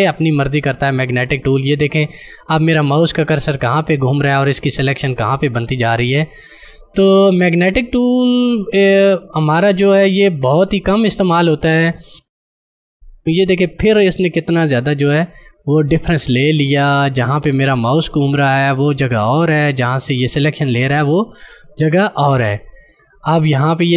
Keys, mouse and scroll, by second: 12.2 space, 16.7 space, 17.0 ctrl+click, 17.2 ctrl+space.